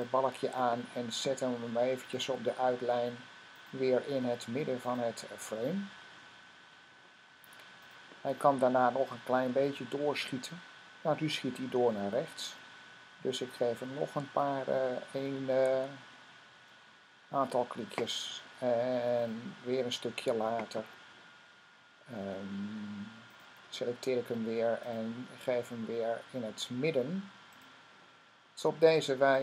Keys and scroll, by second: 14.6 Right, 16.0 Right, 16.4 Right.